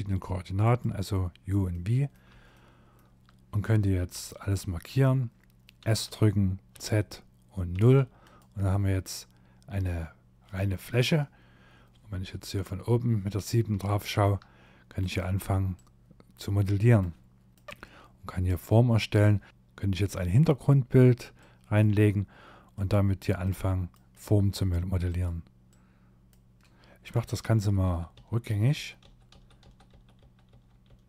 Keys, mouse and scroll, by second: 0.7 middle click, 1.5 shift+middle click, 3.2 a, 4.8 s, 7.7 middle click, 11.1 KP_7, 11.9 scroll down 2, 12.7 scroll down 1, 12.9 shift+middle click, 14.0 click, 14.8 click, 20.4 click, 21.8 click, 24.1 click, 24.7 click, 26.6 ctrl+z, 26.9 ctrl+z, 27.2 ctrl+z, 27.5 ctrl+z, 27.8 ctrl+z, 28.1 ctrl+z, 28.4 ctrl+z, 28.7 ctrl+z, 29.9 ctrl+z, 30.3 ctrl+z, 30.8 ctrl+z.